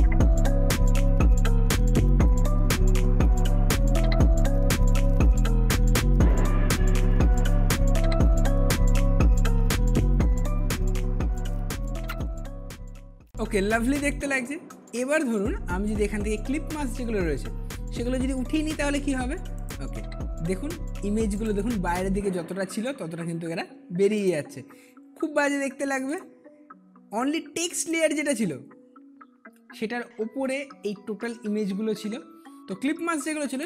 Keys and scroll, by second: 1.6 ctrl+t, 3.7 Return, 4.5 space, 5.9 ctrl+d, 7.8 ctrl+t, 8.7 space, 10.1 space, 11.0 Return.